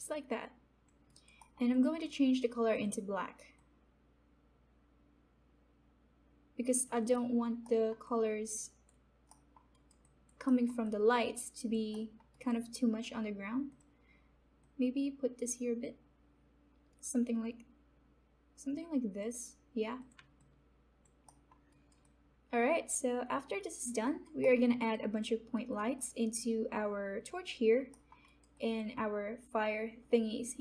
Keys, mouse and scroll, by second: 0.2 alt+click, 1.0 alt+right click, 1.3 alt+middle click, 1.6 alt+click, 2.7-7.1 drag, 7.1 alt+middle click, 7.1 alt+middle click, 8.0 alt+click, 9.4 alt+middle click, 9.7 alt+right click, 10.0 alt+click, 11.1 alt+click, 11.9 alt+middle click, 12.3 alt+right click, 12.5 alt+click, 13.7-21.4 drag, 21.2 middle click, 22.0 alt+right click, 22.3-24.4 alt+drag, 24.4 alt+middle click, 24.9 alt+click, 25.5 alt+right click, 27.9 alt+middle click, 28.2 alt+right click, 28.9 alt+click.